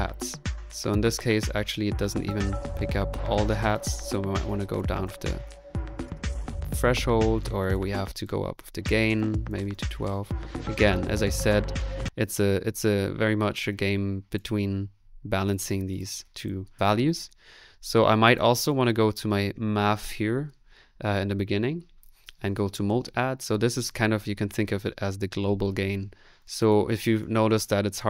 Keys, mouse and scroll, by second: 1.0 click, 2.0 click, 3.8 click, 4.4 click, 7.3 ctrl+z, 7.6 ctrl+click, 7.9 space, 9.1 click, 11.9 space.